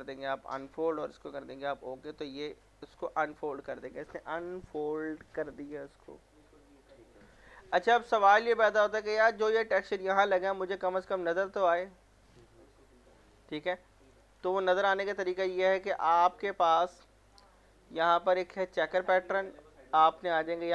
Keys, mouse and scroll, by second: 1.8-2.4 scroll up 1, 2.4-5.6 drag, 8.5 click, 9.3 middle click, 11.3 scroll up 1, 14.0-18.7 drag.